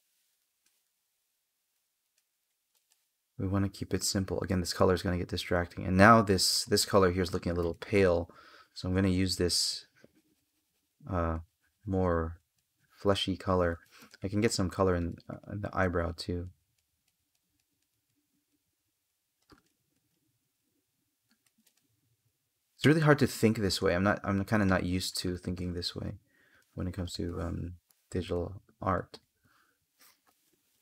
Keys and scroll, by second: 0.3 space, 1.6 space, 7.1 space, 14.3 space, 21.2 space, 23.0 space, 26.4 space.